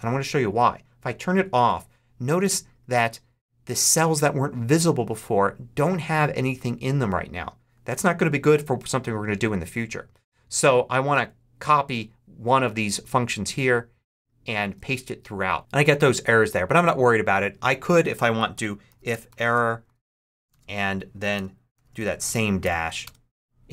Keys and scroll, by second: 11.0 super+c, 14.6 super+v, 18.2-23.0 typing, 20.6 super+Right.